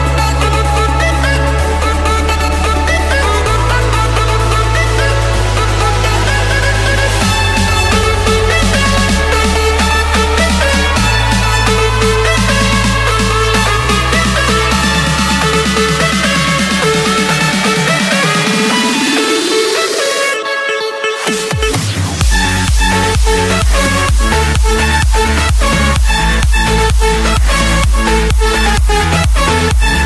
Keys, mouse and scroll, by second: 0.6-1.6 scroll, 2.5 c, 3.2 Return, 5.1-6.1 drag, 6.5-7.0 typing, 7.5 Return, 10.6 Return, 12.5-13.5 drag, 14.0-15.0 typing, 15.8 Return, 18.4-18.9 typing, 19.6 Return, 20.9 Escape, 22.3 click, 22.6 click, 24.9 click, 28.2 click, 28.5 Escape.